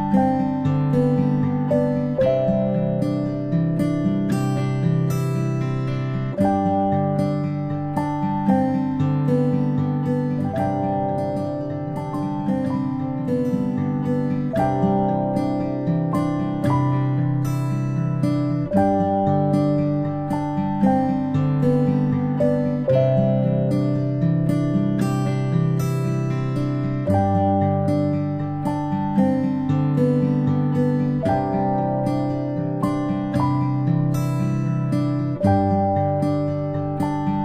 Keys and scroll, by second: 13.3 ctrl+space, 13.7 ctrl+space, 16.1 a, 23.0-23.8 ctrl+alt+space, 29.6 a, 31.6 ctrl+z, 34.2 a, 35.4 a.